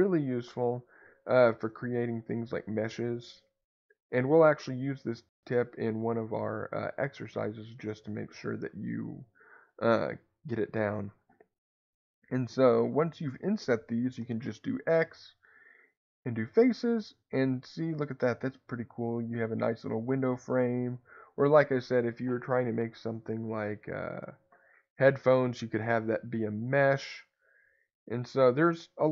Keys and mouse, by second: 10.7 click, 18.8-20.3 middle drag.